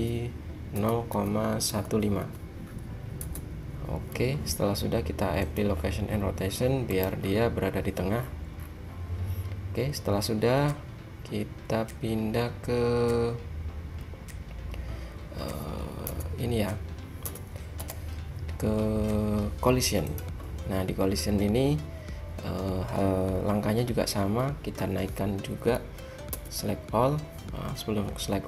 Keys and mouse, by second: 5.5-7.2 drag, 7.5-13.0 drag, 16.2 a, 17.3 a, 17.8 h, 20.2 click, 21.2-22.1 drag, 22.1-26.4 middle drag, 26.4 a.